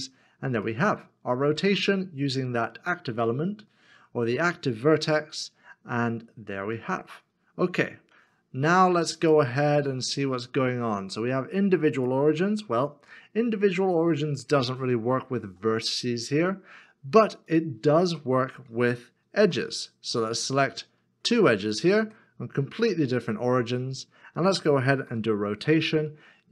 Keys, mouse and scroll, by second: 0.8 middle click, 5.2 middle click, 7.7 ctrl+z, 12.8 middle click, 20.7 2, 21.7 shift+click, 26.0 r.